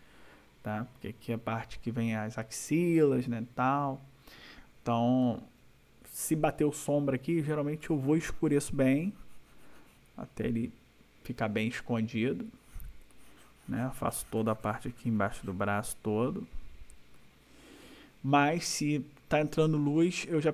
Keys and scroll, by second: 5.2 ].